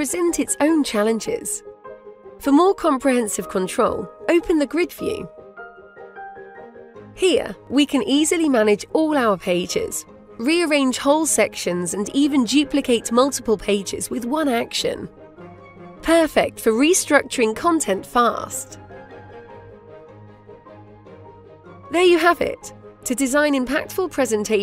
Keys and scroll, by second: 17.7 Delete.